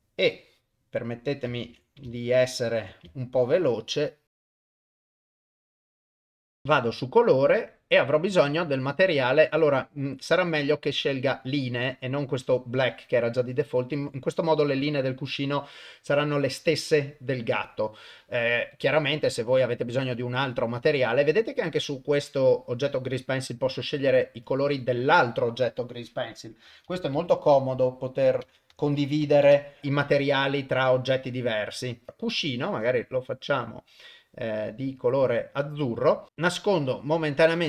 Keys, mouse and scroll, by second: 0.2 click, 1.6 ctrl+z, 2.1 shift+click, 3.3-4.4 shift+drag, 4.7 click, 4.9 click, 5.0 shift+click, 5.3 shift+click, 5.7 click, 5.9 click, 6.1 shift+click, 7.7-12.6 drag, 18.7-23.2 drag, 24.4 click, 24.8-29.5 drag, 32.1 click, 36.3 click, 36.7 click.